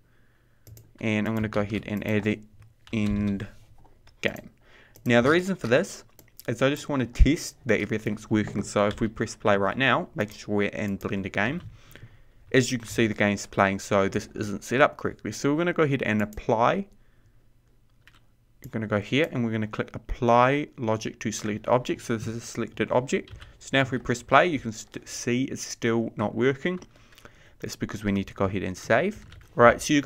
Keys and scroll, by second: 12.0 p, 23.9 p, 29.4 ctrl+s.